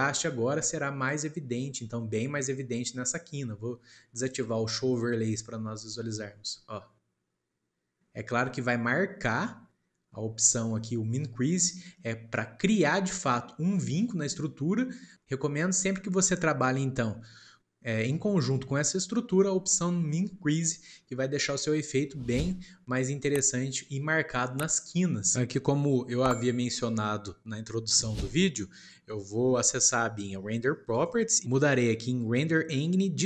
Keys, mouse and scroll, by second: 5.3 click, 15.6-18.7 shift+middle drag, 31.0 click.